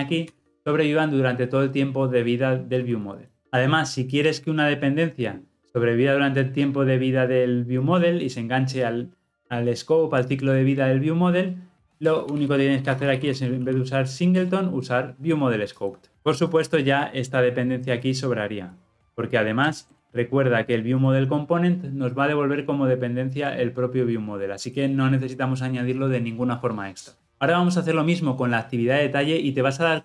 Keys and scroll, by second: 0.0 ctrl+alt+l, 0.3 ctrl+alt+o, 14.4 Return.